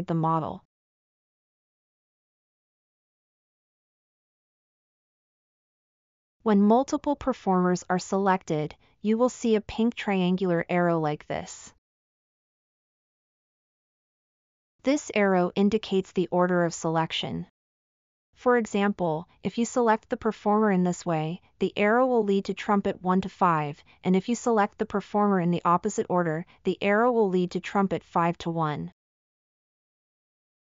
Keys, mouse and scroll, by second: 2.7 middle click, 3.0 scroll up 1, 3.9-4.3 middle drag, 4.5 middle drag, 4.8 scroll up 1, 6.0 middle click.